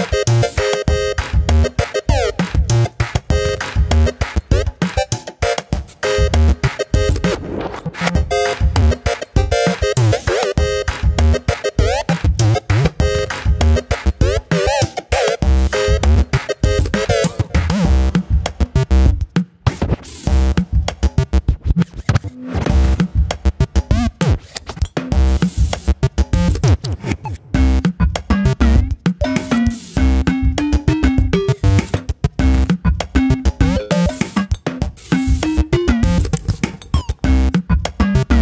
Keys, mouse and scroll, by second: 0.2 ctrl+r, 1.0 click, 1.5 Delete, 2.4 click, 3.1 click, 3.7 shift+middle click, 4.4 ctrl+r, 5.5 click, 7.2 click, 7.8 e, 8.9 click, 9.2 click, 9.5 g, 10.6 click, 10.8 g, 13.9 middle click, 14.5 KP_7, 15.3 click, 15.7 a, 16.1 middle click, 16.5 KP_1, 16.9 e, 18.2 scroll down 2, 18.3 middle click, 18.6 scroll up 3, 18.8 shift+middle click, 19.7 scroll up 1, 19.8 middle click, 20.1 KP_7, 20.4 scroll down 1, 20.5 shift+middle click, 20.9 ctrl+r, 21.5-22.5 scroll up 1, 23.3 ctrl+r, 24.6 ctrl+r, 25.5 scroll up 1, 25.7-27.4 shift+middle drag, 27.5 click, 27.7 shift+click, 28.1 middle click, 28.4 shift+click, 28.5 shift+click, 28.7-29.7 middle drag, 29.8 KP_7, 30.7-32.5 drag, 32.5 g, 33.9 alt+/, 34.5 click, 35.3 alt+/, 35.5 scroll down 2, 35.6 middle click, 36.1 KP_7, 36.4-36.8 scroll up 2, 36.8 click, 37.5 click, 38.1 scroll down 1, 38.2 middle click.